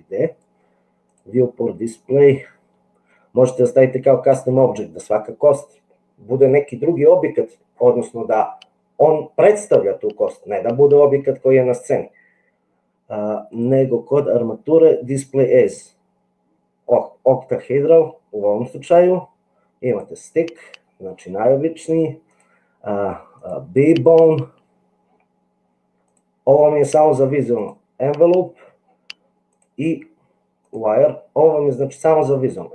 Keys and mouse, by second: 1.1 click, 13.6 click, 18.9-20.0 drag, 22.4-23.5 drag, 26.1-27.8 drag, 29.6-30.8 drag, 32.1-32.7 drag.